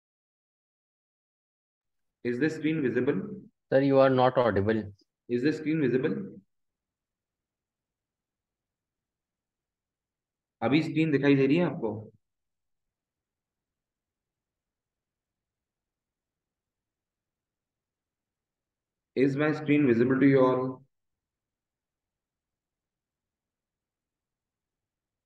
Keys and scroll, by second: 6.8 shift+Up, 7.2 Down, 9.0 ctrl+`, 10.1 Right, 10.7 Left.